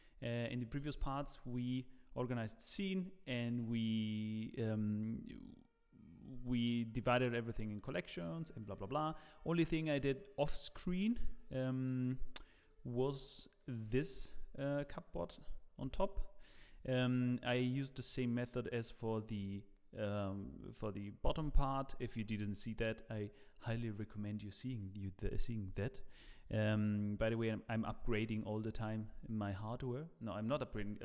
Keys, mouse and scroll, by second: 0.2 middle click, 0.2 scroll down 4, 0.7 click, 1.1 scroll up 2, 1.3 middle click, 2.6 middle click, 8.2 middle click, 12.6 click, 13.0 scroll up 4, 13.3 middle click, 13.8 click, 14.7 click, 15.1 middle click, 15.8 g, 16.9 middle click, 18.2 middle click, 18.2 g, 21.6-23.0 scroll down 1, 23.0 scroll up 1, 23.9 middle click, 26.3 shift+middle click, 26.8 middle click, 27.7 scroll down 1, 28.0 middle click, 28.7 click.